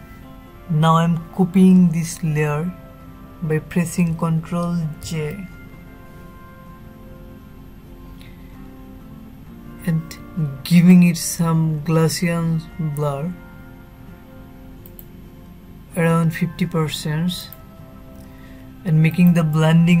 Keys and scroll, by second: 4.3 ctrl+j.